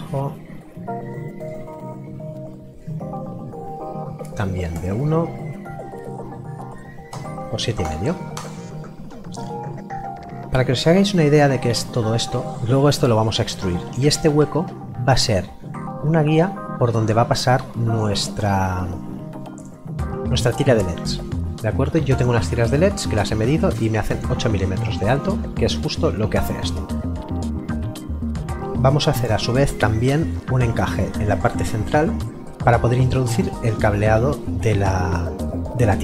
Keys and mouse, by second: 4.7 KP_1, 7.1 Return.